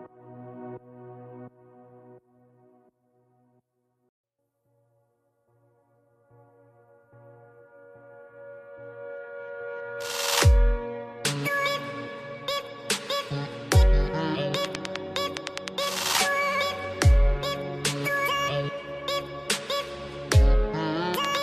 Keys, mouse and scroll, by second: 1.5 click, 2.9 click, 5.6 click, 7.6 click, 8.8 click, 11.5 right click, 13.1 click, 16.5 click, 19.7 ctrl+z, 19.9 ctrl+z, 20.4 click.